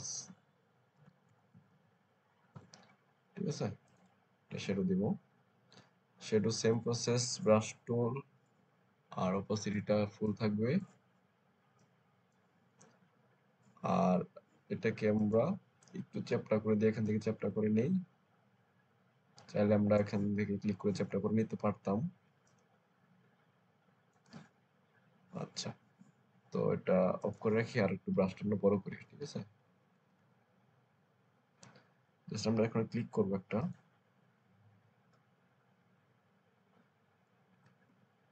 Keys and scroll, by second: 0.1-1.6 typing, 2.4 Return, 6.5 b, 28.2 ], 28.8 ], 29.5 ], 30.1 ], 37.8 ctrl+z.